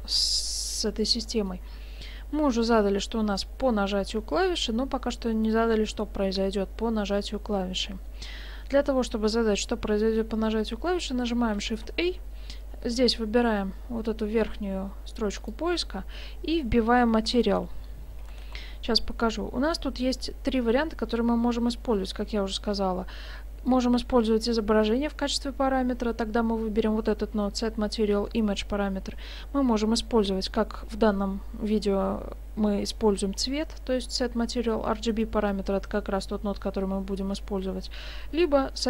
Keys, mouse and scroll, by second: 1.4 middle click, 11.7 shift+a.